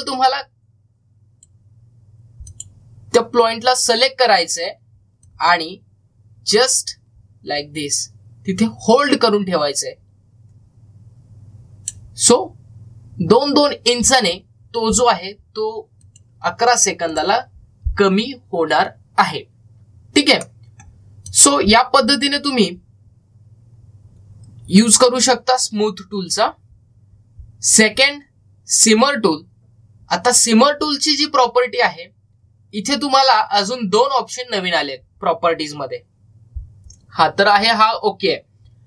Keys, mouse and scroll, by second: 0.8-3.3 drag, 6.1-15.2 drag, 16.9 click, 21.2 middle click, 22.1 click, 26.9-27.6 typing, 27.1-33.4 drag.